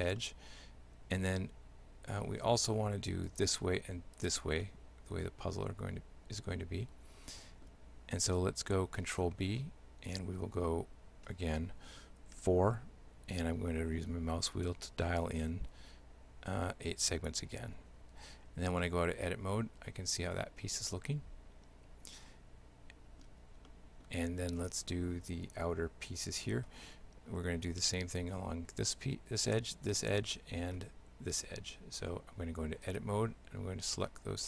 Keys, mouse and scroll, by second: 0.2 shift+middle click, 3.3 shift+right click, 4.2 shift+right click, 4.7 shift+middle click, 9.1 ctrl+b, 18.1 Tab, 18.9 shift+middle click, 23.7 middle click, 24.6 right click, 30.4 shift+middle click, 32.0 Tab, 32.9 right click, 33.9 shift+right click.